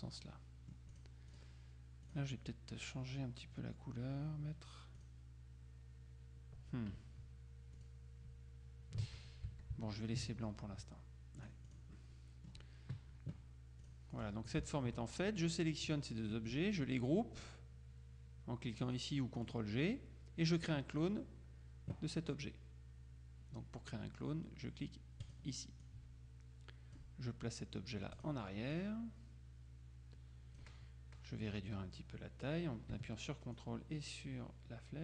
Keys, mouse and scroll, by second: 1.1 click, 2.2 click, 5.1 click, 7.9 click, 9.6 ctrl+z, 11.5 click, 13.9-14.8 drag, 19.5 click, 20.9 click, 25.3-27.5 drag, 28.2-31.1 drag, 33.6-35.0 ctrl+drag.